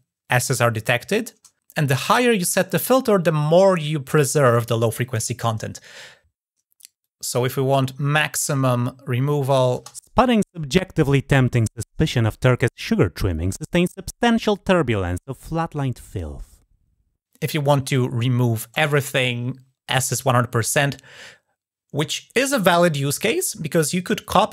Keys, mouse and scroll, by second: 6.8 click, 9.2 click.